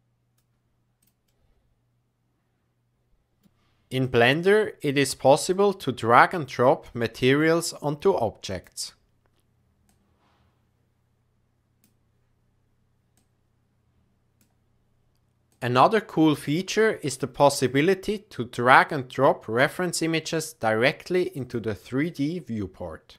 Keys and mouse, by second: 1.3-3.4 middle drag, 4.0 click, 5.6-7.3 drag, 8.5-8.9 drag, 9.8-11.8 drag, 13.2-14.3 drag.